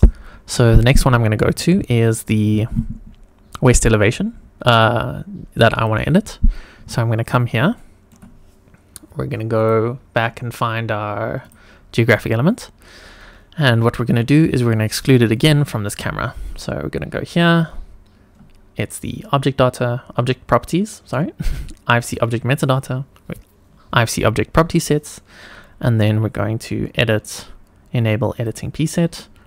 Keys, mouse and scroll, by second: 2.0 click, 5.7 click, 6.7-7.5 scroll down 1, 7.7-8.1 shift+middle drag, 9.5 click, 11.4 click, 12.1 click, 15.3 click, 28.3 click.